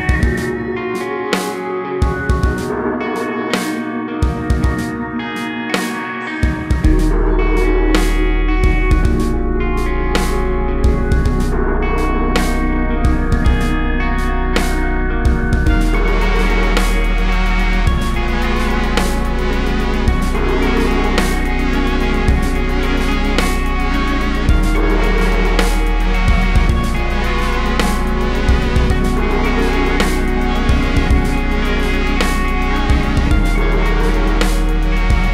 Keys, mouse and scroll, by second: 0.1 s, 0.1 click, 0.5 g, 1.3 click, 1.4-1.9 scroll up 1, 1.9-2.3 scroll down 1, 2.4 click, 2.8 shift+click, 3.1 click, 3.3 shift+click, 4.1 g, 5.0 right click, 5.2 alt+a, 5.3 `, 12.3 `, 12.5-13.1 scroll up 1, 13.3 scroll down 1, 13.5 `, 13.7 scroll up 1, 13.9 scroll down 1, 15.7 click, 16.3 s, 17.1 s, 17.6 click, 17.9 scroll down 1, 18.9 click, 19.8 scroll down 1, 20.6 scroll up 1, 22.3 click, 24.7 scroll down 1, 24.8 `, 26.0 click, 26.6 KP_0, 26.9 scroll up 1, 27.1 a, 27.4 click, 27.4-28.0 scroll down 1, 28.3-29.4 scroll down 1, 30.3-33.8 drag, 32.3-32.9 scroll up 1, 32.9 s.